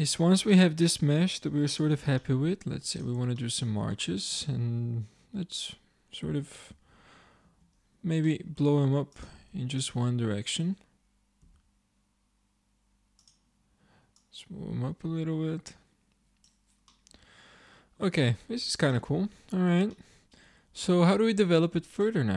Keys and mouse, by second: 1.9 shift+d, 4.4 Tab, 6.8 s, 8.8 a, 9.1-10.3 drag, 11.5 s, 14.6 click, 16.9 click, 17.3 click, 17.7 click, 18.3 Tab, 19.1 middle click, 20.1 middle click.